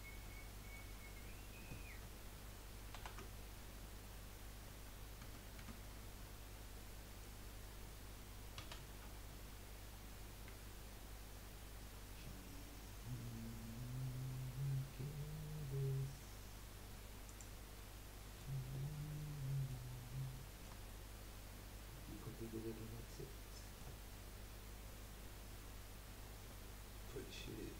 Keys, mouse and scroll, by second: 0.2-2.9 middle drag, 2.9 ctrl+r, 6.9-9.1 middle drag, 9.1 s, 17.7-18.7 middle drag, 18.7-19.4 scroll up 3, 19.4-19.9 middle drag, 19.9-20.3 scroll down 1, 20.3-20.9 shift+middle drag, 20.9-21.2 scroll up 2, 22.1-22.6 middle drag, 22.6 scroll down 3, 22.9 scroll up 1, 23.1-26.1 middle drag, 26.5 ctrl+z.